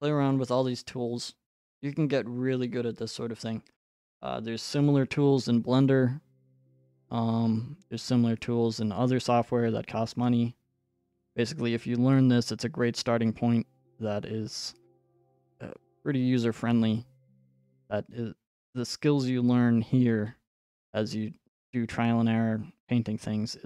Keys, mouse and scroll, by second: 0.8 click, 2.1-2.8 scroll, 3.3-3.9 scroll, 10.2-12.5 scroll.